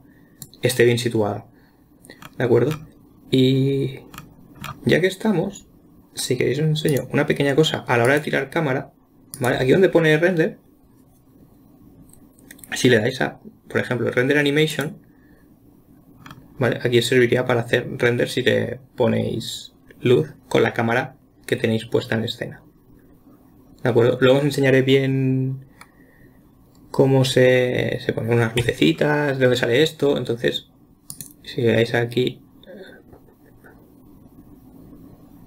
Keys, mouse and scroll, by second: 2.6-3.1 scroll down 1, 4.6-5.7 scroll down 10, 7.3 click, 8.5 click, 9.8-12.9 drag, 31.5-34.6 drag.